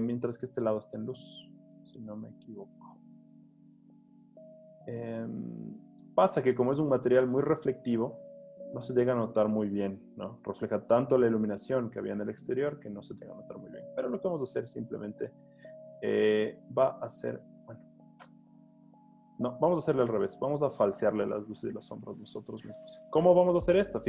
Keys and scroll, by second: 1.8 z, 6.2 z, 8.1 z, 10.0 h, 14.1 h, 19.6 z, 20.6 z, 23.0 h.